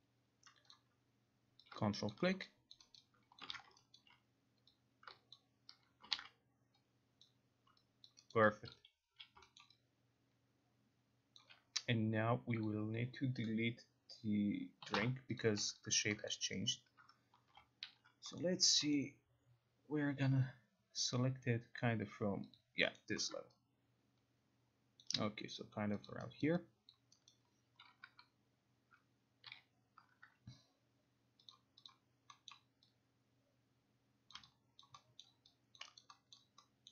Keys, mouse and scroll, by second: 0.8 click, 1.8 click, 2.2 ctrl+click, 2.8 alt+click, 3.1 alt+middle click, 3.4 alt+right click, 3.7 ctrl+z, 4.1 alt+right click, 5.2 alt+right click, 5.4 ctrl+click, 6.3 ctrl+z, 7.3 click, 8.2 alt+click, 8.5 alt+click, 8.8 click, 8.8 alt+right click, 9.2 q, 9.7 alt+middle click, 11.5 alt+click, 12.8 click, 14.9 Delete, 15.5 click, 16.0 alt+click, 16.4 alt+middle click, 16.8 alt+right click, 17.4-18.5 typing, 18.5 middle click, 19.1 middle click, 22.6 click, 23.1 middle click, 23.4 middle click, 25.1 alt+click, 25.5 scroll, 26.2 click, 26.5 alt+right click, 27.0 alt+click, 27.9 alt+right click, 29.6 9, 31.6 click, 32.0 click, 32.6 middle click, 34.4 click, 34.9 alt+click, 35.3 alt+middle click, 35.9 alt+click, 36.1 alt+right click, 36.5 alt+middle click.